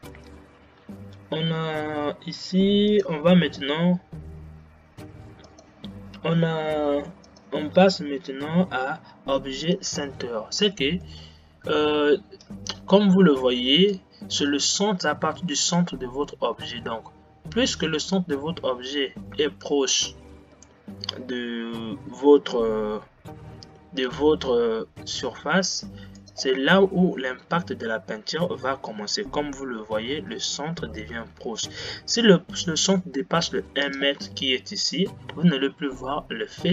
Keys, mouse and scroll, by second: 10.0-10.4 drag, 11.4-19.7 middle drag, 19.7 g, 27.1 scroll up 2, 30.6 g.